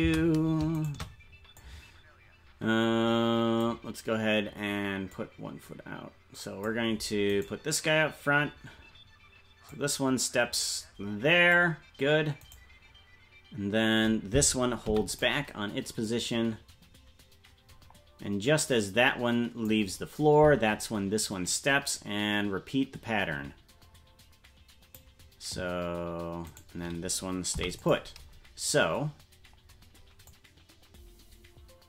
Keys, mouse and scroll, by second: 0.9 shift+right click, 0.9 shift+space, 1.6-3.7 drag, 5.1-6.7 drag, 7.5 right click, 9.7-11.6 drag, 12.5-14.8 right drag, 14.8 i, 16.1-19.7 drag, 21.5-25.0 drag, 26.6 right click, 27.5 i, 30.3-31.8 drag.